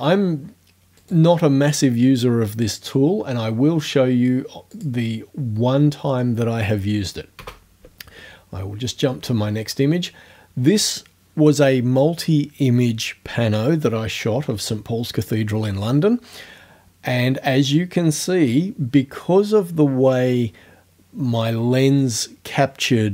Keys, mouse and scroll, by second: 1.0 right click, 4.8 click, 7.4 space.